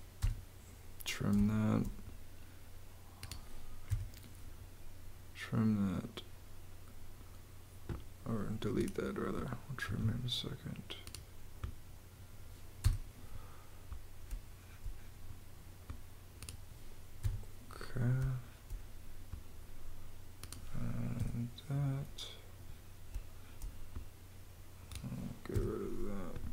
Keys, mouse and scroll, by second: 0.1 BackSpace, 1.3 space, 3.8 BackSpace, 9.8 Escape, 12.7 BackSpace, 14.3 space, 17.1 BackSpace, 18.1 space, 21.1 BackSpace, 23.0 space, 25.4 BackSpace.